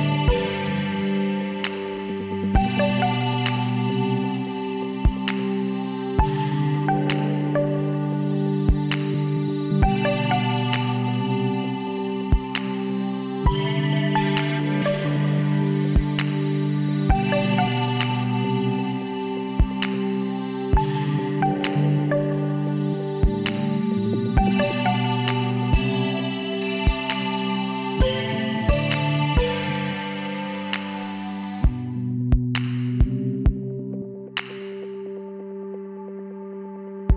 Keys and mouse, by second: 0.6 KP_1, 1.1 middle click, 4.3-6.0 drag, 8.1 s, 11.2-12.8 middle drag, 12.8-14.5 drag, 16.5 s, 19.9-21.0 drag, 21.0 middle click, 21.9 z, 24.4 middle click, 25.3-31.0 drag, 30.2 x, 32.1 click, 32.5-33.8 middle drag, 35.5 KP_7, 36.5-37.1 middle drag.